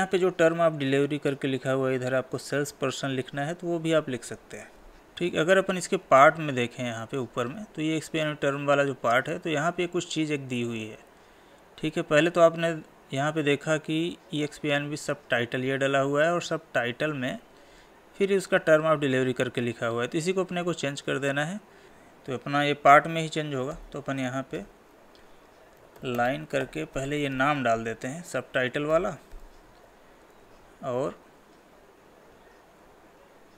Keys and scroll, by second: 2.7 Escape, 5.0 Up, 27.3 ctrl+v, 29.9 alt+Tab, 30.6 Tab.